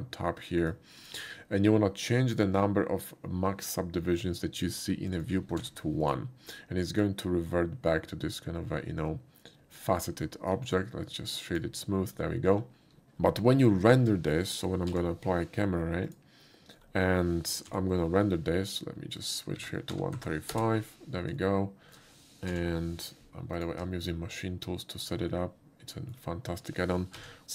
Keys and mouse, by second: 0.6 shift+click, 1.0 shift+click, 5.1 click, 6.0 1, 6.0 click, 8.2-9.4 middle drag, 10.2 middle click, 10.7 right click, 11.5 click, 13.5 shift+middle click, 14.9 Page_Down, 16.0 click, 19.2 click, 19.9 3, 20.2 5, 20.5 Return, 21.4-22.0 shift+middle drag, 22.5 Page_Down, 23.5 click, 24.0-25.0 shift+middle drag, 25.3-26.1 ctrl+middle drag, 27.2 Page_Down.